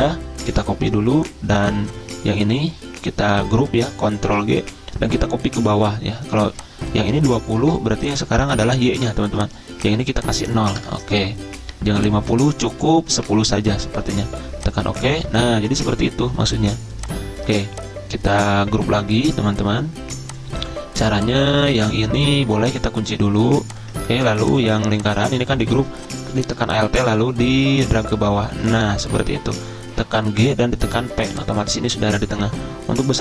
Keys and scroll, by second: 0.5 Delete, 4.2 ctrl+g, 7.6 ctrl+c, 8.9 ctrl+v, 10.8 0, 13.2-13.7 typing, 21.6 ctrl+z, 30.3 ctrl+g, 30.9 p.